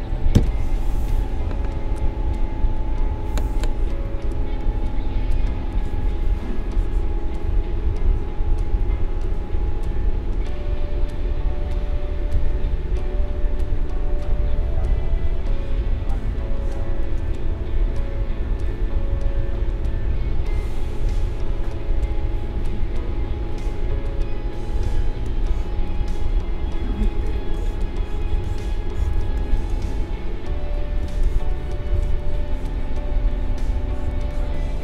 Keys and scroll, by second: 0.3 n, 4.3 space, 16.4 space, 25.2 space.